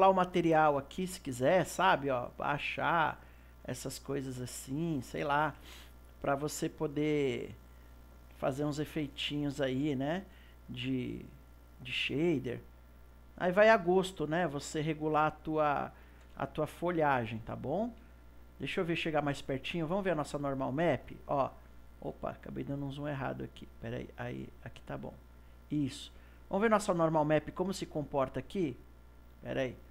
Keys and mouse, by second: 2.2-10.1 drag, 10.1-11.7 ctrl+middle drag, 11.7 click, 13.5 click, 14.3-19.3 middle drag, 19.5 middle click, 20.4-23.6 middle drag, 23.6-25.3 middle drag, 29.4 click.